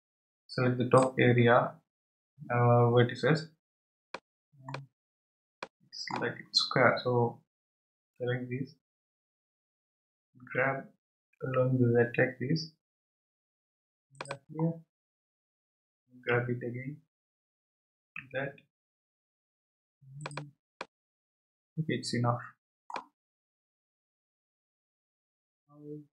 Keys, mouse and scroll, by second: 4.1-5.0 middle drag, 5.0 scroll down 4, 5.6-7.3 middle drag, 7.3-8.1 scroll up 1, 8.1 scroll up 1, 10.4 g, 14.6-15.3 scroll down 2, 17.3 g, 20.8-23.4 middle drag, 23.4-26.0 scroll up 2.